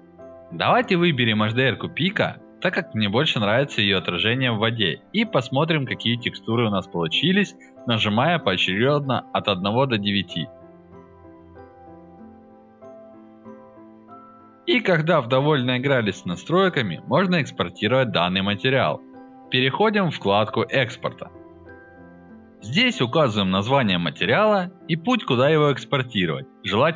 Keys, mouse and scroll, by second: 0.4 click, 0.8-1.5 alt+drag, 1.6-4.3 alt+drag, 4.5-5.4 alt+drag, 5.5-6.5 alt+right drag, 6.7-7.4 alt+drag, 7.6 alt+click, 15.1 click, 16.8 click, 18.0 click, 24.8 drag.